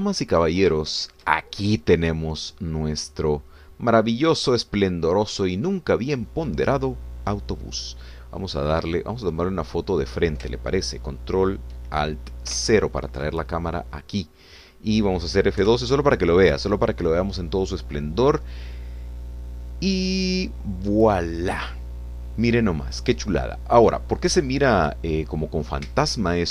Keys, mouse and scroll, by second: 0.3 click, 1.5 scroll down 3, 1.9 shift+click, 2.4-6.2 shift+drag, 6.2-6.6 scroll up 2, 9.4-11.0 drag, 13.5 ctrl+alt+0, 14.6 ctrl+alt+middle click, 14.6-15.0 ctrl+alt+scroll down 1, 16.6 F12.